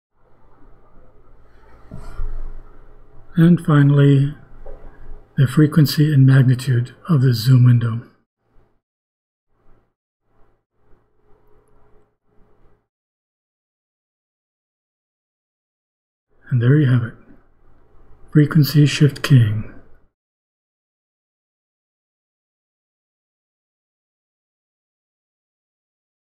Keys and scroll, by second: 1.5 ;, 6.5 BackSpace, 14.2 ;.